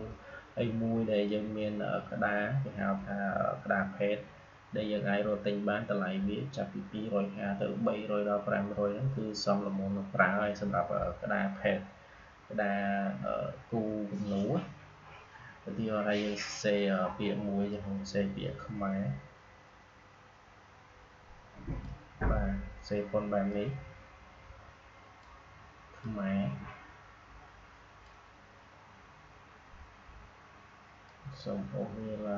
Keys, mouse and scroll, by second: 1.0 click, 17.6-31.0 drag, 31.0-32.3 drag.